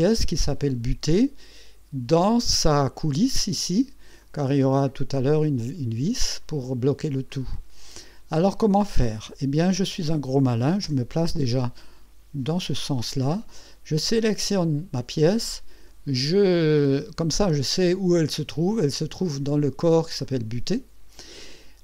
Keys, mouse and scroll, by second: 0.3 scroll up 1, 2.4-3.1 drag, 4.2-5.1 drag, 7.3-8.2 drag, 8.6 click, 10.8 KP_1, 11.8-12.6 right drag, 14.3 click, 20.3 click.